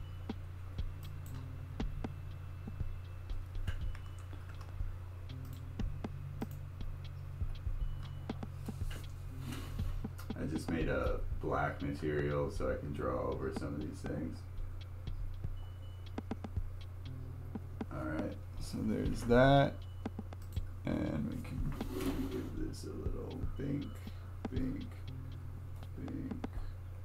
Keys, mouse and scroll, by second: 4.4 ctrl+z, 5.5-17.1 drag, 20.4 click, 22.5-27.0 drag.